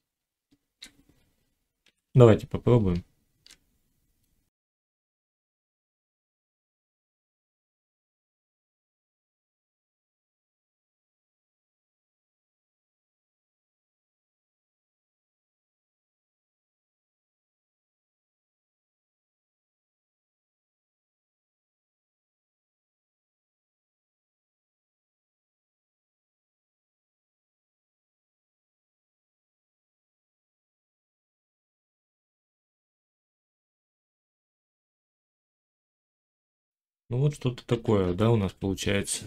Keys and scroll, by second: 2.8 Tab, 6.8 z, 7.5 1, 9.3 shift+Tab, 9.8 g, 10.6 z, 12.9 Tab, 13.3 z, 13.6 Tab, 15.4 z, 16.4 Tab, 16.8 1, 18.3 g, 20.1 g, 21.9 ctrl+r, 22.8 s, 23.6 0, 24.2 g, 26.3 g, 29.0 z, 31.1 x, 32.0 ctrl+z, 32.5 ctrl+z, 32.9 Tab, 33.5 x, 35.3 Tab, 37.6 1.